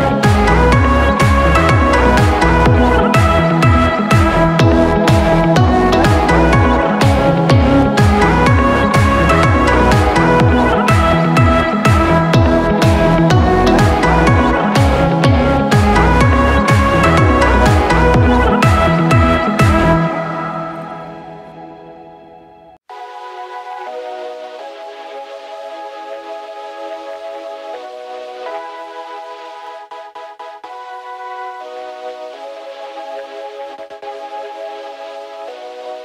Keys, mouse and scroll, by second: 1.9 ctrl+t, 5.0 right click, 35.7 right click.